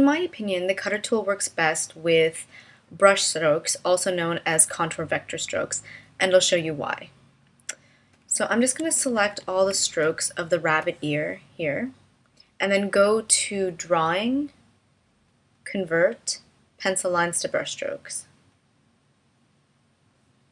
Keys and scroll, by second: 9.0 super+-.